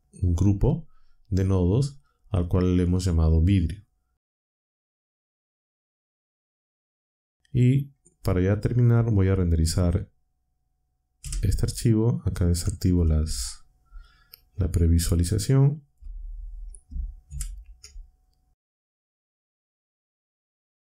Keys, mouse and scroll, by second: 4.7 click, 5.7 click, 11.4 F12, 13.1 z, 17.4 ctrl+Up.